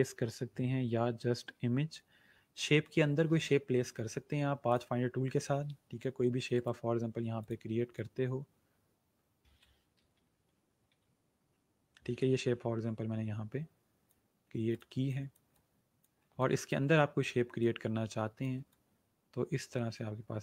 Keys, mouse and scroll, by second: 4.6 click, 7.1 right click, 7.3 click, 9.9 Down, 10.8 Up, 12.9 shift+Up, 14.7 click.